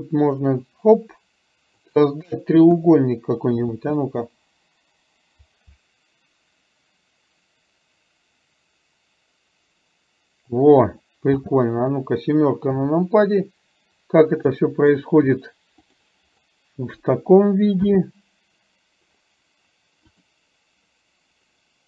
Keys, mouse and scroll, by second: 2.8 KP_0, 3.8 space, 11.4 space, 12.8 KP_7, 14.4 shift+middle click, 17.9 space, 20.3 click.